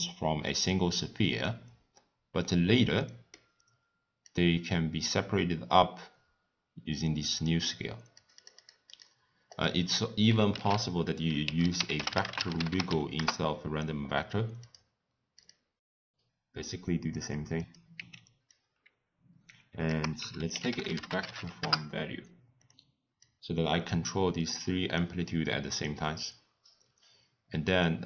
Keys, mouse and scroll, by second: 0.4-0.9 scroll down 1, 0.9-1.2 scroll up 1, 1.2 scroll down 2, 1.4-1.9 scroll up 3, 1.9 scroll down 1, 2.0 scroll up 1, 2.0-2.9 scroll down 4, 2.9 scroll down 1, 3.0-4.2 middle drag, 4.2-7.3 drag, 8.1-9.6 drag, 10.5 ctrl+a, 12.6 g, 15.8 click, 16.1-17.7 drag, 18.3 x, 18.5 click, 19.8 ctrl+a, 23.2-28.0 drag.